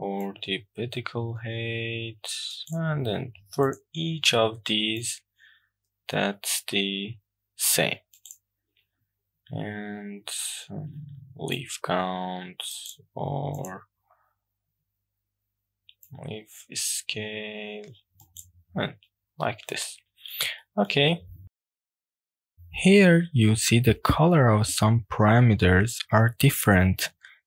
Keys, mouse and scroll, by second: 0.3-2.8 drag, 3.7 click, 5.0-8.4 drag, 11.6-12.9 drag, 13.6 click, 16.1-18.4 drag, 19.1-19.5 scroll down 2, 19.5-20.3 middle drag, 20.6 shift+middle click, 21.1 shift+middle click, 21.9 shift+middle click, 25.0 shift+middle click, 25.3 middle click, 25.8 shift+middle click, 26.1 click.